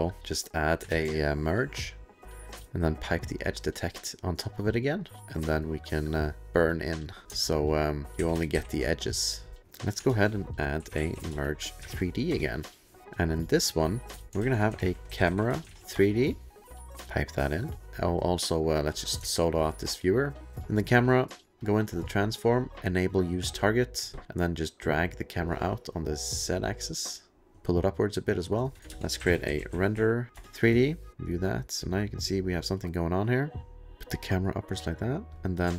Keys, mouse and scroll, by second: 0.2 click, 0.6 click, 0.8 alt+shift+space, 1.2-2.4 typing, 2.6 Return, 2.6 click, 3.3 click, 4.9 click, 6.4 click, 7.4-8.2 alt+scroll, 8.1 ctrl+alt+p, 8.2 ctrl+alt+p, 8.5 ctrl+alt+p, 8.9 click, 9.1 click, 9.7 click, 10.1-12.4 typing, 13.0 click, 13.6 middle click, 13.8 click, 14.1 click, 14.4-16.2 typing, 16.8 click, 17.6 click, 17.9 2, 18.7 click, 19.3 alt+middle click, 19.5-20.4 alt+click, 19.7 alt+click, 20.4 alt+middle click, 20.5 alt+middle click, 21.6 alt+click, 23.5 alt+click, 25.0 alt+click, 27.5-28.6 alt+scroll, 28.8 click, 28.9 alt+shift+space, 29.2-31.1 typing, 30.3 Return, 31.1 click, 31.8 click, 32.8 click, 33.7 middle click.